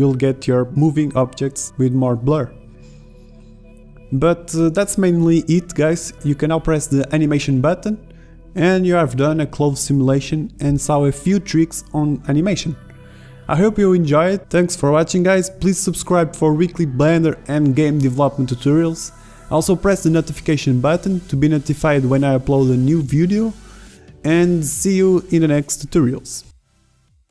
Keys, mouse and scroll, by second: 0.0 Escape, 4.3 shift+Left, 5.6 alt+a.